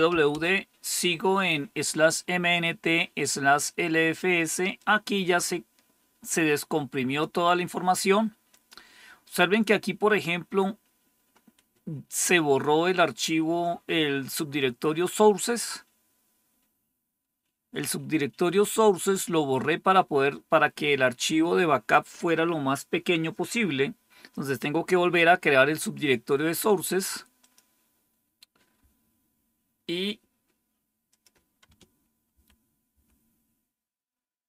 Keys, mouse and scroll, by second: 0.0-0.5 typing, 4.7-7.1 drag, 8.4 click, 27.3 click, 31.0-32.3 drag, 32.3 ctrl+-, 32.9 ctrl+-.